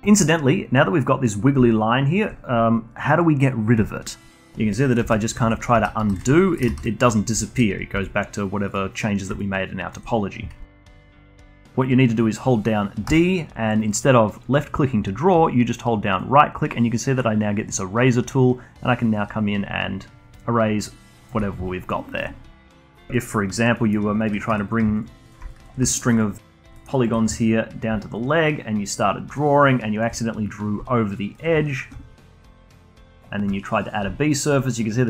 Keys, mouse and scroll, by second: 0.0-3.5 alt+drag, 4.3 middle click, 5.0 ctrl+z, 5.4 ctrl+z, 5.7 ctrl+z, 6.0 ctrl+z, 6.3 alt+click, 6.6 ctrl+z, 7.4-7.9 alt+drag, 7.9 g, 9.4-10.6 alt+drag, 10.6-13.0 alt+middle drag, 13.0-13.8 d, 13.9-14.9 drag, 14.9-16.1 d, 16.2-19.2 right drag, 21.3 d, 22.8 middle click, 23.1-23.5 alt+middle drag, 23.5 alt+click, 23.7 alt+middle click, 24.2 alt+click, 24.5 2, 24.6 click, 24.9 shift+click, 25.2 shift+click, 25.5 alt+click, 25.9 alt+middle click, 26.1 alt+click, 26.7 alt+middle click, 26.9 alt+click, 27.9 d, 28.1 click, 29.0-29.4 d, 29.4 click, 30.0 d, 30.8-32.3 alt+drag, 32.6 shift+drag, 32.8 shift+click, 33.0-34.3 shift+right drag, 34.3-35.0 alt+drag.